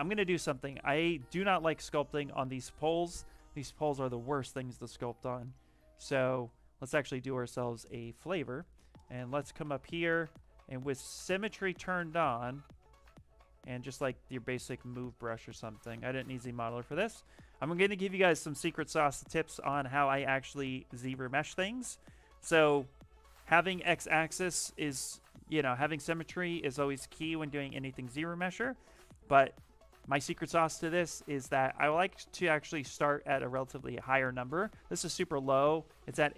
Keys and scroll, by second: 0.9 shift+f, 1.6 shift+f, 10.7-16.2 typing.